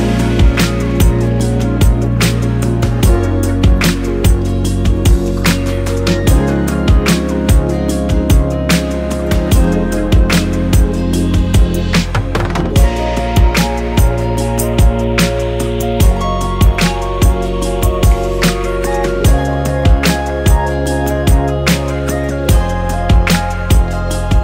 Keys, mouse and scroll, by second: 0.2-4.3 drag, 7.1-8.9 drag, 12.7-20.5 drag, 22.3-24.4 drag.